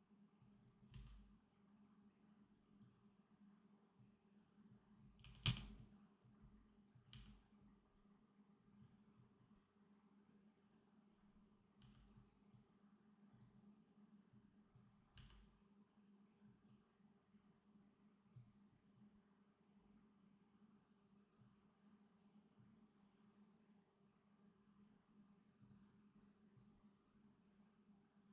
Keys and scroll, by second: 0.8 c, 5.1 r, 7.0 d, 11.7 d, 15.0 v.